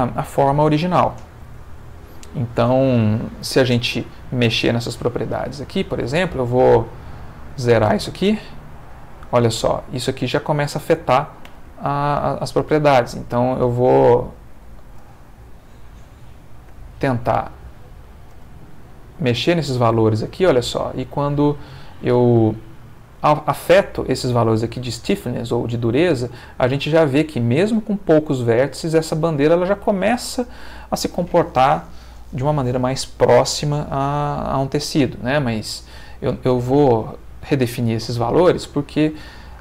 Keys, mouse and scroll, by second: 0.1 shift+middle click, 2.1 middle click, 2.9 Escape, 5.0 space, 6.3 Escape, 6.5-7.8 drag, 7.9 space, 11.5 F1, 12.3 Escape, 14.1 click, 15.0 space, 16.7 Escape, 17.5 click, 18.4 space, 21.0-22.0 middle drag.